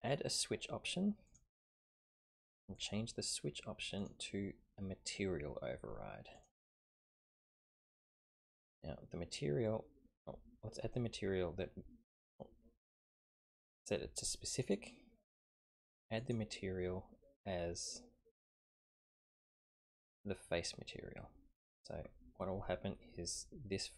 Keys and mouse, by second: 1.3 click, 2.7 click, 4.1-6.5 drag, 12.2-12.6 drag, 13.2-14.7 drag, 16.3 click, 19.0-21.7 drag.